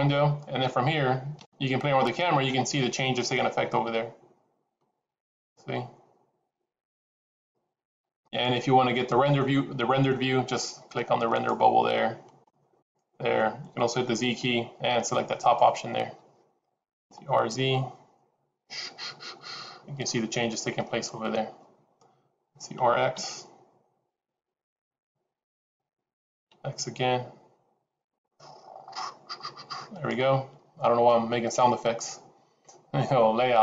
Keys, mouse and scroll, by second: 32.6 click.